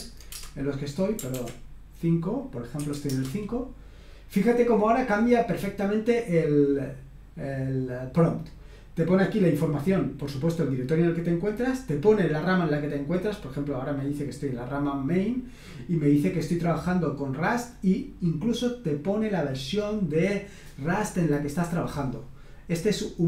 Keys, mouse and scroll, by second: 0.0-3.0 typing, 10.6 click, 12.3 click, 13.9 click.